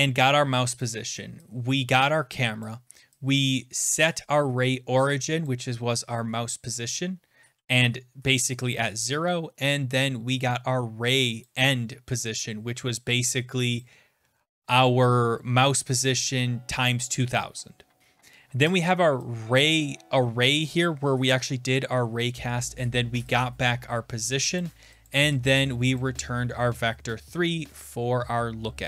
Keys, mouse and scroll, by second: 0.8 click, 1.2 click, 2.6 click, 5.4 click, 11.4 click, 13.8 click, 22.2 click, 22.6-24.6 scroll, 24.6 click, 25.1 click, 26.0 click, 26.4-27.1 scroll, 27.1 scroll.